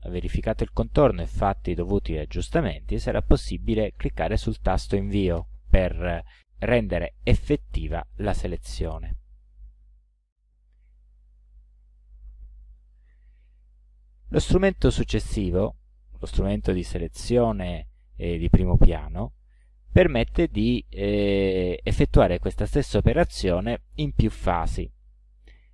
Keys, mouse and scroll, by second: 0.0 ctrl+middle click, 1.0 ctrl+click, 2.4 ctrl+scroll down 2, 3.0 ctrl+scroll down 2, 3.7 ctrl+middle click, 4.4 ctrl+scroll up 2, 5.4 ctrl+Return, 12.1 ctrl+shift+a, 14.4 click, 15.6 click.